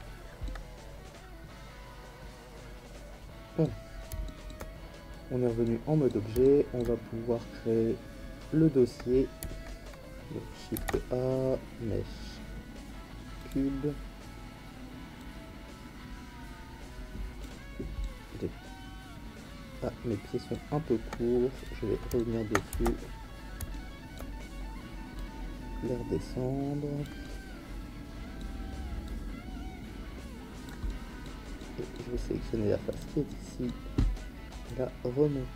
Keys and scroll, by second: 10.7 shift+a, 22.7 Tab.